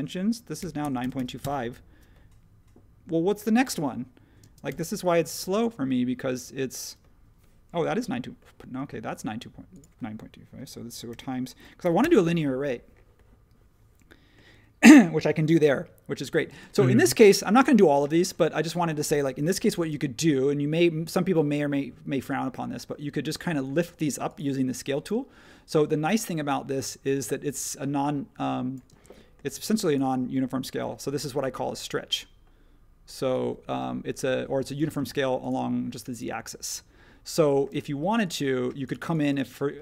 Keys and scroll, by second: 0.3-1.6 typing, 3.4-4.7 typing, 11.0-12.0 typing, 16.5 space, 18.1 space, 19.8 s, 23.7 space, 25.0 s, 28.9 space, 29.5 space, 31.3 s, 34.9 space, 37.7 space.